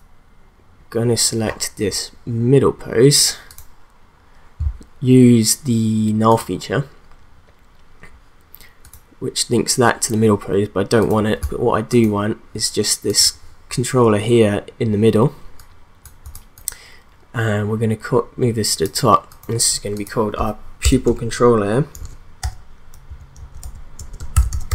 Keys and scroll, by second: 20.8 Return, 22.0-24.7 typing.